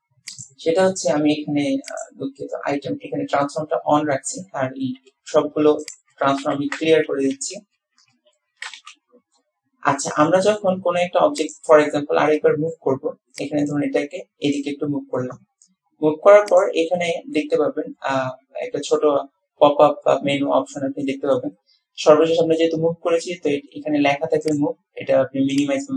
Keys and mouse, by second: 0.4 click, 5.1 alt+g, 5.6 alt+r, 6.4 alt+r, 7.0 alt+s, 7.5 alt+s, 8.3 alt+g, 8.5 alt+r, 8.9 alt+s, 10.4-10.7 drag, 11.4 click, 12.5 click, 12.6 middle click, 13.5-14.8 drag, 24.6 click.